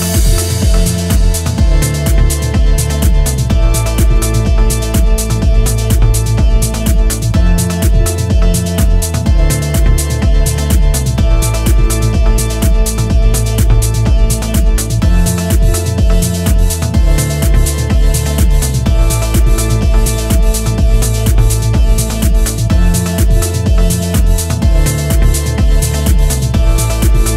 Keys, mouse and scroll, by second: 0.2-0.5 scroll up 1, 0.5-1.7 scroll down 1, 3.2-3.7 scroll up 1, 4.1 shift+middle click, 4.8 Tab, 5.1-5.6 scroll up 1, 6.3 1, 11.0 s, 12.5 g, 14.8 2, 15.3 click, 16.7 e, 19.2 e, 20.9 click, 21.5 r, 22.9 click, 23.3 r, 24.8 click, 24.9 r, 25.8 click, 25.9 r.